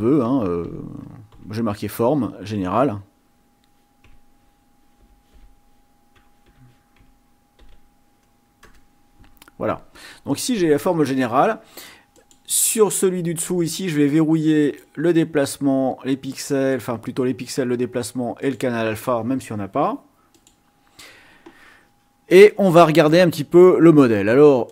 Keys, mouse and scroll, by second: 0.0-1.3 typing, 5.0 g, 5.4 n, 6.5-8.2 typing, 8.8 Return, 12.2 click, 14.6 click, 16.5 click, 18.5 click, 20.3 click, 24.6 click.